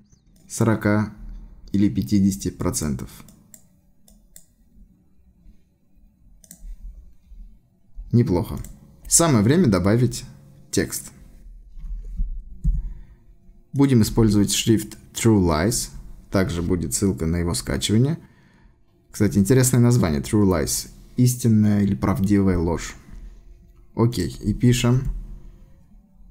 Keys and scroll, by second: 12.7 t.